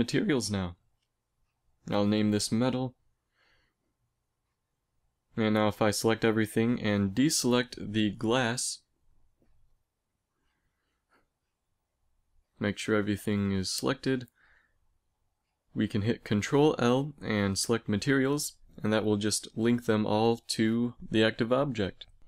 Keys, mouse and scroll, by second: 4.9 right click, 5.2 middle click, 5.8 a, 6.4 a, 6.8-7.8 drag, 8.8 right click, 12.2-14.8 middle drag, 14.8-16.6 right drag, 16.6 ctrl+l, 21.6-22.2 drag.